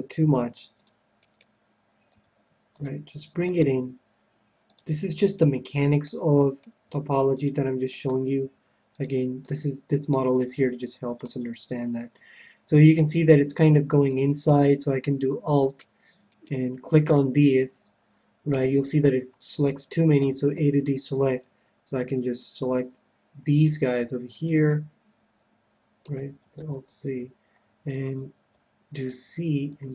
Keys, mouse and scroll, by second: 0.2 g, 0.9-2.1 drag, 1.3 right click, 2.1 g, 2.8 right click, 3.0 click, 3.7 g, 4.6 right click, 4.8-6.7 drag, 5.6 g, 6.0-9.2 right drag, 6.8 g, 7.4-10.5 drag, 8.4 g, 9.2-13.1 middle drag, 9.4 right click, 13.6-15.8 middle drag, 15.5-18.1 right drag, 17.1-18.7 middle drag, 20.2 a, 20.5 c, 22.2 a, 24.3-26.1 right drag, 24.6-26.2 middle drag, 26.5 ctrl+z, 28.5 c.